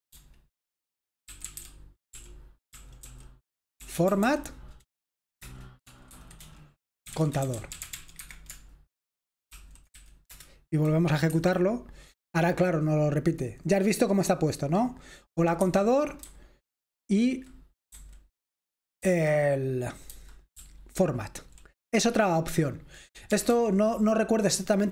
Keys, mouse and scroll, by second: 0.0-4.2 typing, 5.4-7.9 typing, 8.1 Escape, 9.2-10.4 typing, 11.3 F5, 15.6 Escape, 16.1-21.2 typing, 23.3 typing.